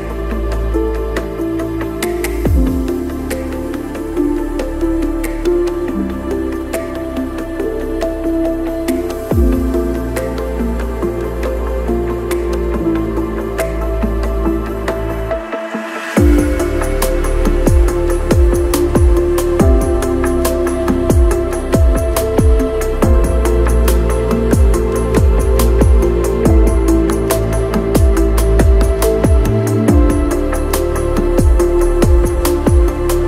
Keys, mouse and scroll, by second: 2.7 Tab, 2.9 click, 3.0 middle click, 3.8 click, 5.0 click, 5.5 click, 5.6 KP_0, 5.7 shift+click, 5.8 click, 5.9 alt+z, 6.5 alt+z, 6.5 click, 6.5 KP_0, 6.6 shift+click, 7.2 shift+click, 7.5 shift+click, 7.9 shift+KP_0, 8.1 shift+click, 8.4 shift+click, 9.3 click, 9.8 click, 10.7 click, 11.2 click, 11.8 click, 12.1 middle click, 12.3 click, 12.5 click, 13.0 middle click, 13.0 click, 13.2 click, 13.7 click, 14.0 middle click, 14.4 click, 14.5 KP_0, 15.7 click, 15.8 click, 17.4 click, 17.8 middle click, 18.7 click, 19.3 click, 20.5-25.2 typing, 20.7 shift+middle click, 21.4 shift+middle click, 21.7 middle click, 21.8 shift+middle click, 22.0 shift+middle click, 23.8 click, 24.7 click, 25.2 click, 25.3 click, 25.5 click, 25.9 ctrl+shift+middle click, 26.2 click, 26.4 middle click, 27.9 click, 29.7 KP_0, 29.9 g.